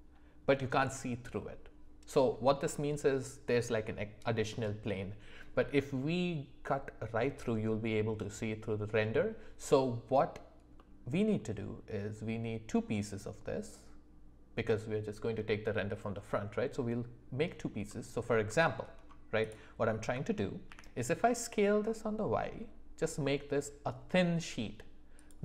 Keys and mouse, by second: 10.8 middle click, 17.8-18.3 middle drag, 18.5 shift+middle click, 19.4 click, 19.9 s.